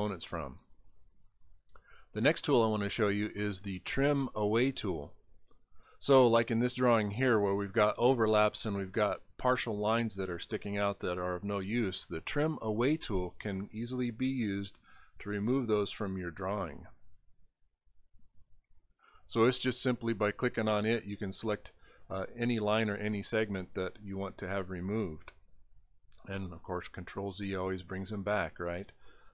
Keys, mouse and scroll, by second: 5.6 click, 6.4 middle click, 9.4 middle click, 9.6 middle click, 10.3 scroll up 3, 14.5 click, 15.2 click, 16.2 click, 16.9 scroll up 5, 17.6-17.9 scroll up 4, 22.6 click, 22.6 right click, 23.4 click, 23.4 right click, 24.2 scroll up 2, 26.1 ctrl+z, 27.0 scroll up 1, 27.7 scroll up 1, 28.3 scroll up 2.